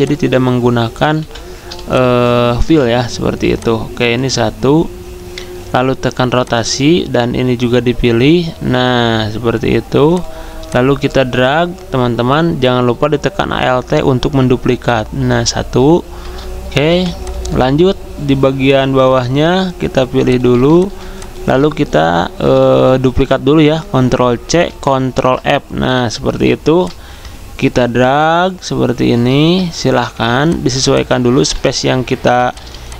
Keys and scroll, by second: 2.6 typing, 16.9 v, 21.0 z, 24.5 ctrl+c, 24.7 ctrl+f, 30.2 z, 31.5-32.9 typing.